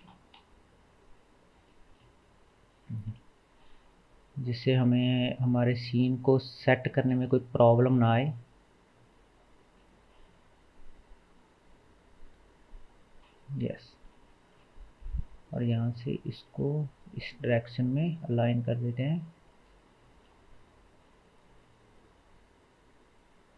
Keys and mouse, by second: 0.4 KP_7, 2.0-9.6 shift+middle drag, 2.8 r, 9.6 r, 13.6 KP_1, 16.5 middle click, 16.5 r, 21.7-23.5 right drag.